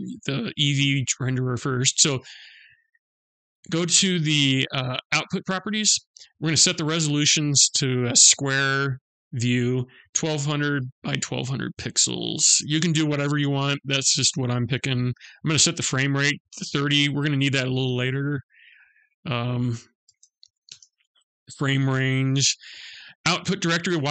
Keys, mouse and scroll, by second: 2.2 click, 6.2 click, 12.1 0, 14.4 click, 18.5 click, 21.1-22.6 scroll down 4.